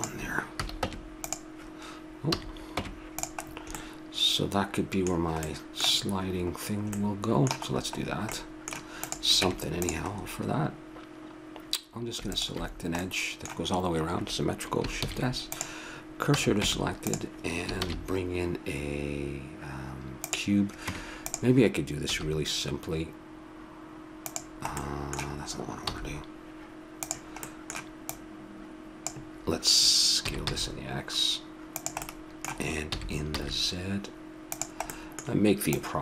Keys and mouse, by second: 0.5 a, 0.9 Tab, 1.3-3.3 drag, 2.3 a, 2.8 Tab, 9.0 click, 9.4 Tab, 9.9 middle click, 10.2 middle click, 10.3-11.9 drag, 12.3-14.2 drag, 15.0 shift+s, 16.3 a, 16.6 Tab, 17.8 shift+a, 20.8 Tab, 22.1 s, 24.8-25.9 middle drag, 25.9 s, 28.1-29.9 drag, 30.3 s, 32.0-33.8 middle drag, 32.9 s, 35.7-36.0 drag.